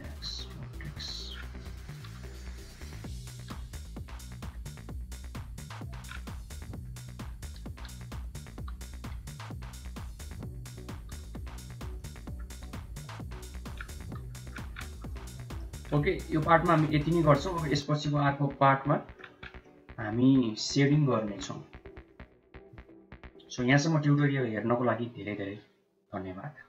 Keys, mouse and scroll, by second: 0.1 x, 1.5 shift+z, 2.1 click, 3.4 l, 4.3 g, 6.2 click, 7.0 r, 11.0 g, 11.9 click, 12.5 g, 13.8 Tab, 14.2 middle click, 15.1-15.5 middle drag, 16.0 ctrl+s, 16.3-19.1 middle drag, 19.5-20.7 middle drag, 21.0 shift+middle click, 21.4-22.2 middle drag, 22.6-23.4 shift+middle drag.